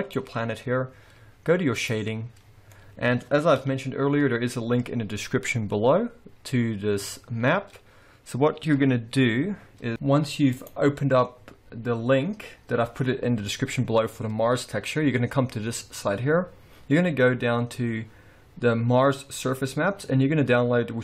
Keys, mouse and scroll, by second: 0.0 click.